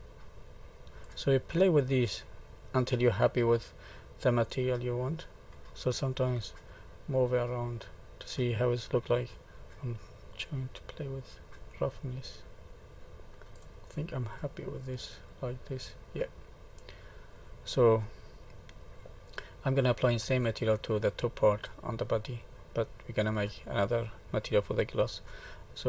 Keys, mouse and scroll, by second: 1.6 middle click, 6.3 middle click, 9.3 click, 9.6 ctrl+z, 10.1 click, 14.3 middle click, 18.0 middle click, 19.3-20.7 scroll down 1, 24.5-24.9 scroll down 1, 24.9-25.8 scroll up 6.